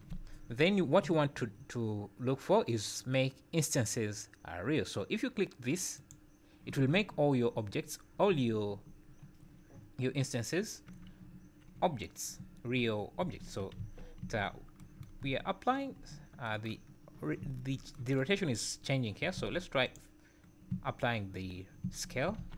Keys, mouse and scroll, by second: 10.4 scroll down 2, 11.2 `, 11.7 scroll up 3, 13.2 `, 13.8 ctrl+z, 14.2 `, 15.2 `, 17.4 `, 19.3 ctrl+a, 20.7 `, 21.7 scroll down 3, 21.8 `, 22.3 ctrl+a.